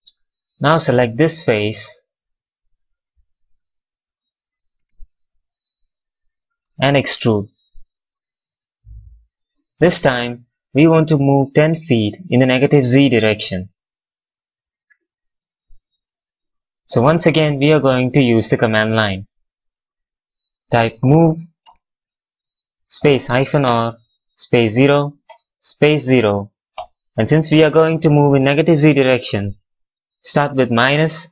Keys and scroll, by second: 4.6 space, 8.3 w, 20.5-21.8 typing, 23.2 r, 23.6 space, 24.7 0, 25.2 space, 26.1 0, 26.7 space, 30.9 -.